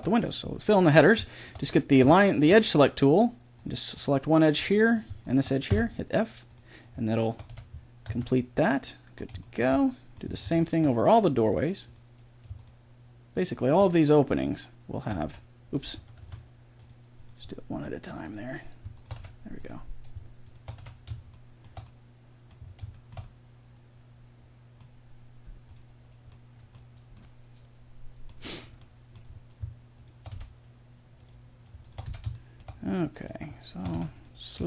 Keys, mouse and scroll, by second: 1.5-3.5 middle drag, 5.7 f, 7.5 f, 8.1 a, 8.5-10.7 middle drag, 16.2 a, 19.1 f, 20.8 f, 22.3-25.7 middle drag, 26.3-29.9 middle drag, 29.9-32.3 right drag, 30.3 f, 32.1 f, 33.9 f.